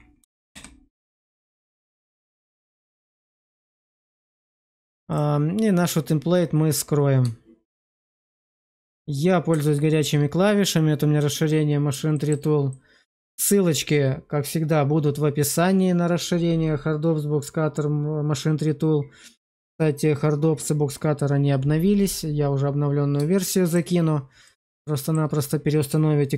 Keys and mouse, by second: 0.4 Return, 3.3 click, 5.0 click, 7.6 shift+2, 9.0 middle click, 9.6 shift+middle click, 11.4 middle click, 12.0 shift+middle click, 12.6 middle click, 23.2 shift+middle click, 24.3 middle click, 24.9 shift+middle click.